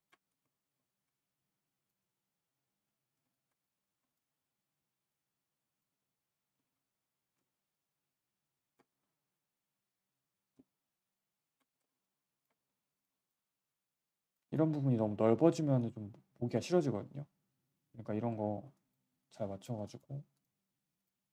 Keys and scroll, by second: 0.3 z, 3.6 w, 3.8 w, 5.9 3, 6.5 z, 6.7 z, 8.9 1, 11.7 3, 12.6 1, 16.5 3.